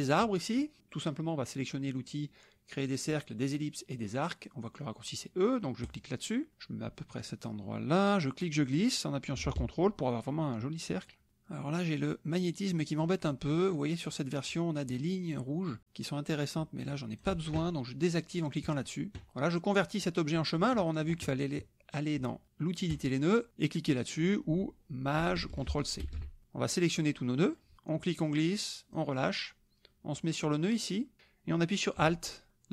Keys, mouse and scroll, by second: 5.8 click, 8.1-17.4 drag, 18.6 click, 22.9 click, 26.0 ctrl+shift+c, 26.7-27.7 drag, 27.8-29.2 drag, 30.7-32.7 drag.